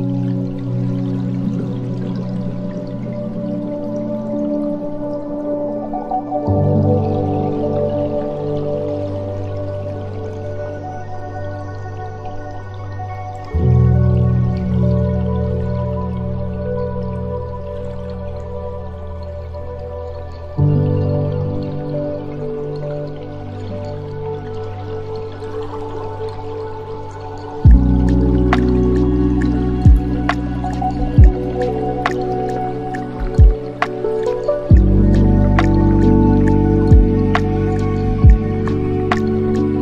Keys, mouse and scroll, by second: 5.7-6.9 scroll up 1, 6.9-10.0 drag, 11.2-13.9 drag, 13.9-14.8 scroll down 2, 14.8-18.3 drag, 18.3-19.4 scroll down 1, 19.4 click, 21.6-22.4 scroll down 5, 23.2-25.8 drag, 25.8 space, 26.8-27.1 scroll up 4, 28.1 scroll down 2, 30.2-34.1 middle drag, 34.1 space, 35.8 click, 37.1 click, 37.7 space.